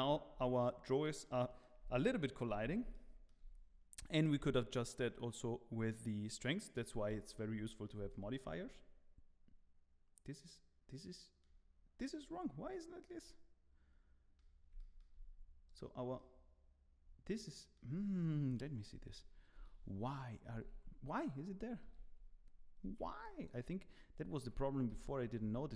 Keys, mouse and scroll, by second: 1.3 middle click, 1.9 shift+middle click, 2.5-2.9 scroll up 3, 2.9 shift+middle click, 4.7 shift+click, 7.2-7.7 scroll down 7, 7.7 middle click, 8.1 shift+middle click, 8.5 middle click, 12.1 click, 12.5 scroll down 1, 12.7 middle click, 14.7 shift+middle click, 16.4 shift+middle click, 16.4 click, 16.4 scroll up 2, 18.5 KP_3, 19.6 2.